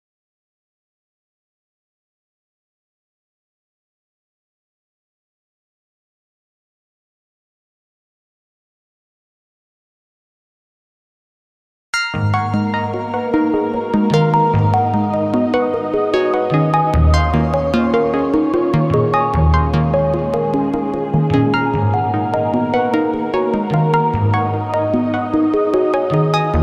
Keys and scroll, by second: 2.2 space, 4.5 space, 9.9 space, 10.7 space, 12.0 i, 12.8 k, 13.4 i, 13.8 k, 15.5 i, 15.9 k, 18.2 i, 18.6 k, 19.2 i, 19.7 k, 21.7 i, 22.3 k, 24.5 i, 24.9 k.